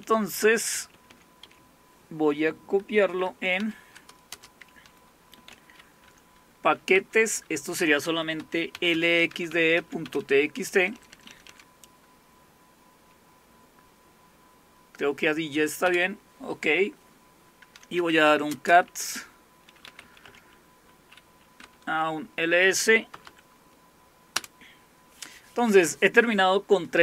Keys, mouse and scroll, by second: 0.8 Left, 0.9 Left, 1.1 Left, 1.4 Left, 3.7-7.0 typing, 8.0-11.3 typing, 15.9 Return, 17.8-20.5 typing, 21.7-23.7 typing, 24.4 Return.